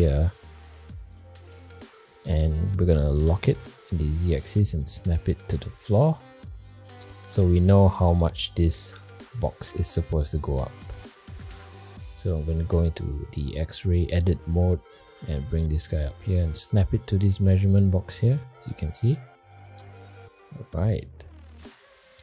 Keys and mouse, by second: 1.1 middle click, 1.7-2.5 shift+middle drag, 2.7 shift+middle drag, 3.2 g, 6.1-6.5 middle drag, 6.8 shift+middle click, 7.2-7.5 middle drag, 8.0 click, 8.5-9.1 middle drag, 9.4 shift+middle drag, 10.0 middle drag, 10.7-11.0 shift+middle drag, 11.5 Tab, 12.5 alt+z, 13.0 middle click, 13.6 click, 14.4 middle click, 15.1 g, 17.3 alt+z, 18.3 middle click, 18.9 middle click, 19.5 middle click, 20.4 Tab, 21.0 middle click, 22.0 click.